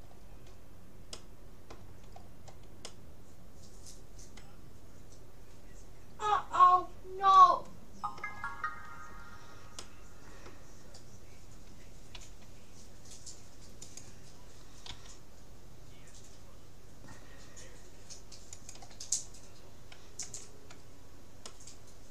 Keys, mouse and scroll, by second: 2.0-4.4 middle drag, 9.4-11.4 middle drag, 12.2 s, 15.0 g, 20.3 a, 21.0 middle click.